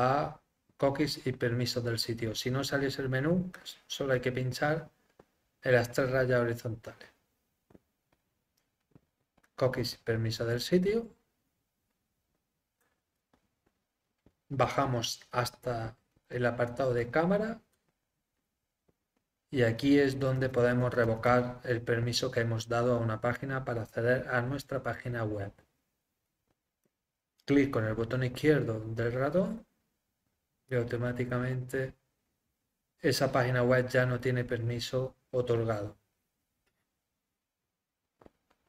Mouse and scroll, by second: 3.5 click, 4.1 click, 9.4-11.4 drag, 13.1 middle click, 13.5 middle click, 13.9 middle click, 14.5 middle click, 14.8 middle click, 16.9 click, 18.0 middle click, 26.8-29.3 drag, 34.9 middle click.